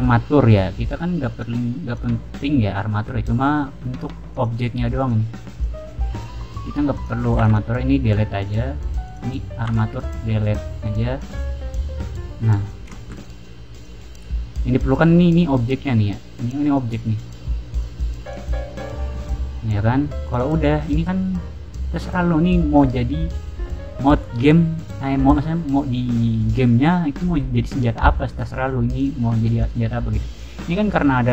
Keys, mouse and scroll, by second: 1.2 click, 1.8 click, 2.7-3.0 middle drag, 4.2 click, 4.9 click, 5.4 click, 6.0 click, 6.3 middle click, 6.9 click, 7.3 x, 7.4 click, 8.2 middle click, 9.0 click, 9.6 x, 9.9 click, 10.9 middle click, 10.9-11.3 scroll down 2, 11.6 middle drag, 11.8 scroll down 2, 12.5 click, 12.8 shift+middle click, 13.7 click, 14.2 scroll down 2, 16.6 click, 17.2 click, 17.6 click, 18.2 drag, 18.6 middle drag, 19.2-19.6 middle drag, 20.2 click, 20.6-21.0 middle drag, 21.2-22.6 middle drag, 22.7 scroll down 2, 22.9 middle click, 23.2 scroll up 2, 28.5 middle click, 28.9 click, 29.3 middle drag, 29.5 click, 30.2 click, 30.8 click.